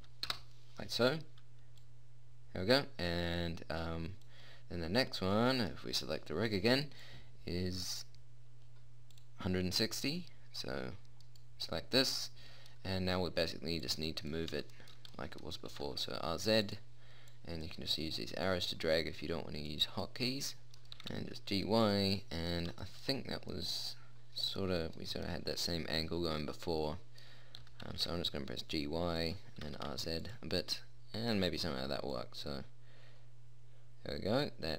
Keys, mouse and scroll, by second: 2.1-4.4 middle drag, 5.5 right click, 9.1 middle click, 11.5-13.1 middle drag, 14.2 click, 16.0 r, 20.7 middle click, 21.2 g, 22.1 click, 24.1 middle click, 24.7 middle click, 27.9 g, 29.9 r, 32.5 middle click, 34.3 middle click.